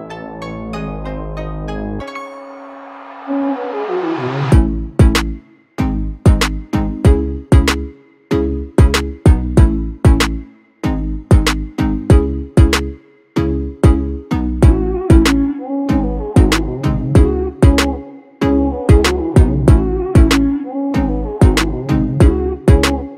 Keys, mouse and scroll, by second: 0.0 alt+click, 1.6 alt+click, 2.5 alt+click, 3.4 alt+click, 3.6 alt+click, 6.5 alt+click, 8.0 alt+click, 15.4 ctrl+-, 15.6 ctrl+-, 15.9 ctrl+-, 17.2 ctrl+-, 17.8 ctrl+-, 20.8 alt+shift+click.